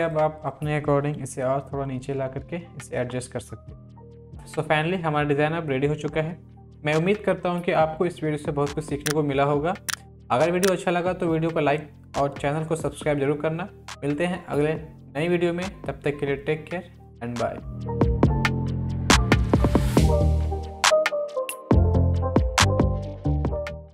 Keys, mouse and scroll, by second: 1.2 Down, 2.9 Up, 3.7 Down.